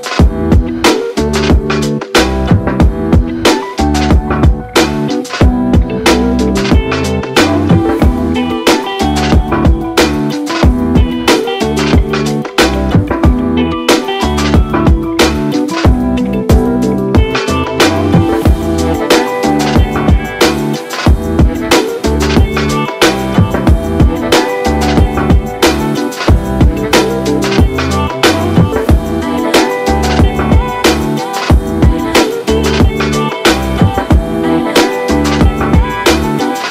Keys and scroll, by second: 2.7 ctrl+d, 5.5 ctrl+d, 10.3 Delete, 15.9 ctrl+d, 35.2 ctrl+d.